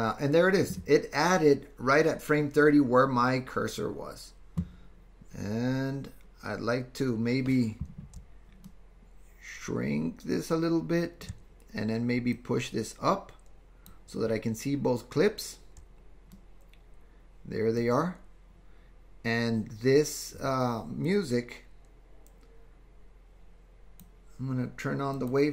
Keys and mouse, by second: 8.7-11.3 ctrl+drag, 12.4-14.0 drag, 16.3-17.8 middle drag, 21.3-24.1 drag.